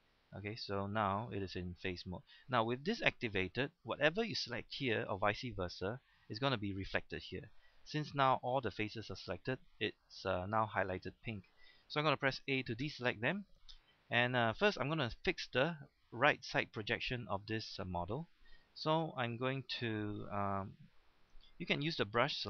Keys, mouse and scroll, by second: 0.6-2.0 scroll up 1, 2.0-5.7 scroll down 1, 9.9-10.3 scroll up 1, 10.3-12.1 scroll down 1, 12.8 a, 13.5-14.8 scroll up 1, 20.8 shift+middle click, 21.5-22.4 scroll up 2.